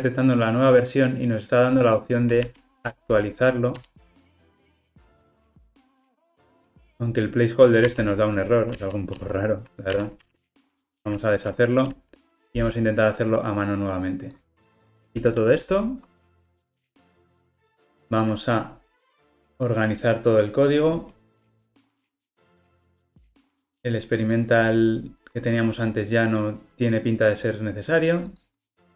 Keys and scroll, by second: 2.9 alt+Return, 7.9 super+x, 10.2 super+z, 11.0 super+z, 19.2 shift+F6, 21.3 ctrl+alt+o, 21.5 alt+super+l.